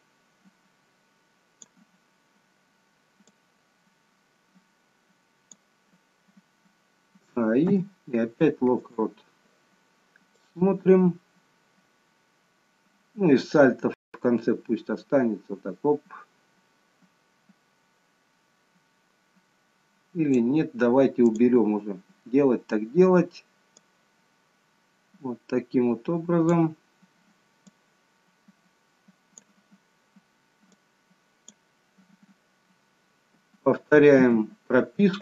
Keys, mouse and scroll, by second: 0.0 click, 3.3 click, 7.3 a, 7.7 i, 10.4 click, 21.1 click, 23.7 click, 27.6 click, 33.2-34.1 a, 34.1 i.